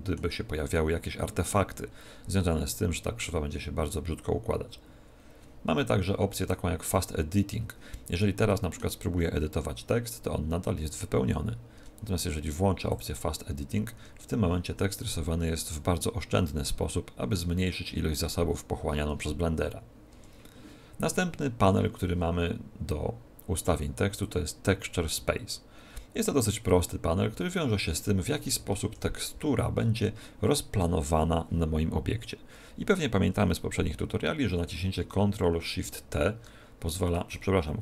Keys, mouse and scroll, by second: 0.7 middle click, 8.1 middle click, 9.1 Tab, 11.7 Tab, 12.8 click, 13.9 Tab, 15.0 middle click, 20.0 Tab, 24.2 click, 25.7-26.0 scroll down 2, 28.8 KP_1, 35.8 ctrl+shift+t.